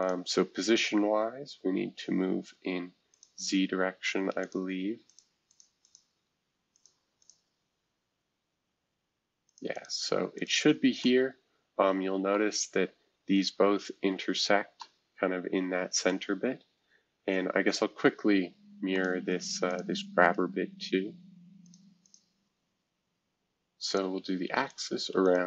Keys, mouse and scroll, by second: 0.0-1.5 drag, 3.1-7.2 drag, 12.3 middle click, 12.8-13.6 scroll up 1, 13.6-14.4 scroll up 1, 16.1-17.1 middle drag, 17.1-18.2 scroll up 2, 18.2-18.9 scroll up 1, 18.9-21.7 drag, 22.0 click, 23.8 click, 24.7 click, 25.2 click, 25.2-25.4 typing.